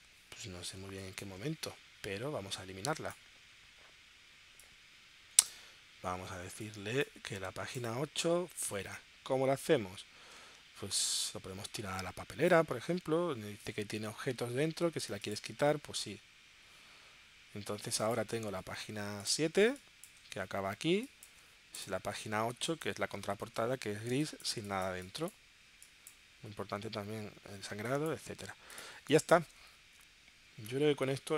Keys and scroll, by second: 0.8 space, 19.6 space, 20.8 space, 22.6 space, 24.1 space, 27.7 space, 29.0 space, 29.5 space.